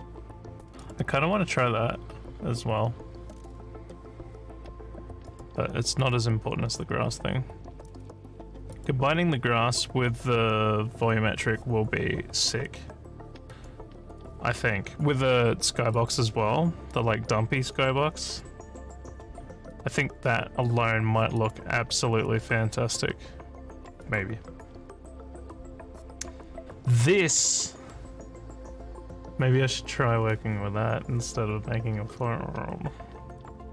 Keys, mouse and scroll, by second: 0.8 click, 5.3 click, 6.0 click, 8.8 click, 15.9 click, 18.3 click, 19.7 click, 21.4 click, 24.0 click.